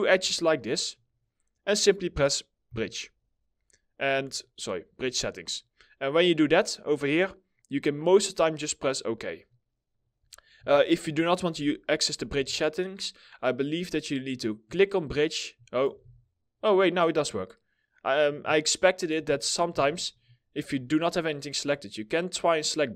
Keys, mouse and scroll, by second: 10.2 4, 11.0 Delete, 11.8 2, 15.5 ctrl+z, 18.8 ctrl+z.